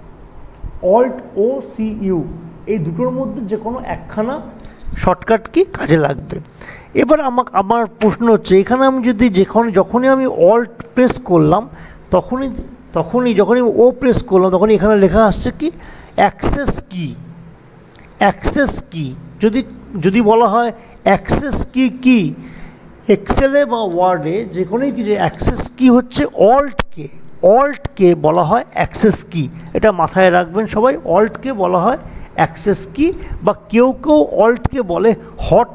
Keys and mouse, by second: 9.4 click, 13.0-13.8 typing, 23.3 click, 23.3 typing.